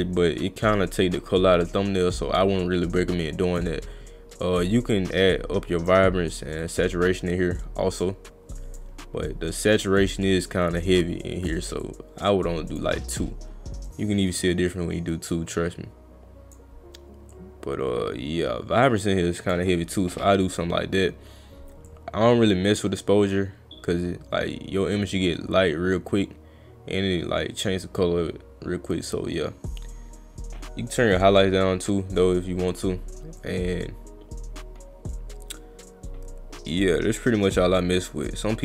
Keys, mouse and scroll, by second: 4.6 click, 6.6 click, 9.9 click, 11.8 click, 13.9 click, 17.3 click, 21.9-27.6 drag, 28.9 click, 33.4-38.3 drag.